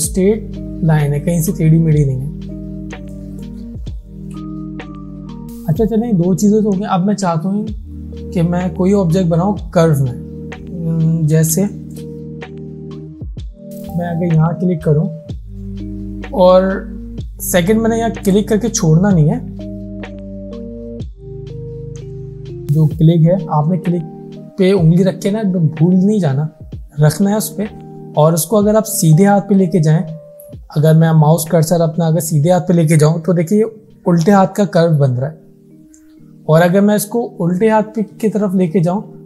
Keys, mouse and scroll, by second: 0.0 alt+scroll up 1, 1.7-2.1 alt+scroll down 1, 3.2 click, 11.5 space, 11.7 click, 12.4 alt+scroll down 1, 13.1 space, 13.2 click, 18.3 click, 19.8 ctrl+z, 20.4-30.1 drag.